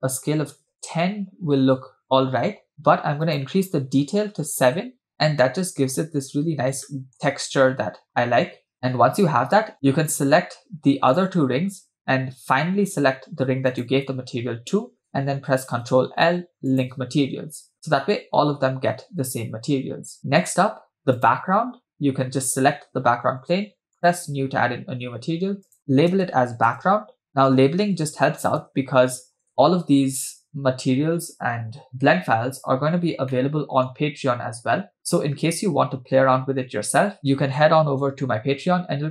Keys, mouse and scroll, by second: 3.2-4.9 drag, 5.1 scroll down 2, 5.6 shift+middle click, 6.3-7.0 scroll up 3, 7.1-7.7 shift+middle drag, 7.7 scroll up 1, 8.6-9.7 scroll down 2, 9.7 shift+middle click, 9.7 scroll down 2, 10.1 click, 11.2 shift+click, 13.7 shift+click, 15.8 ctrl+l, 17.7 scroll down 3, 18.3 space, 18.9-20.2 scroll up 3, 20.3 space, 20.7 scroll down 2, 21.3 click, 24.0-24.5 drag, 26.9-29.5 drag, 33.3 middle click, 34.0-35.4 scroll down 3, 37.2 middle click, 38.6-39.0 scroll up 2.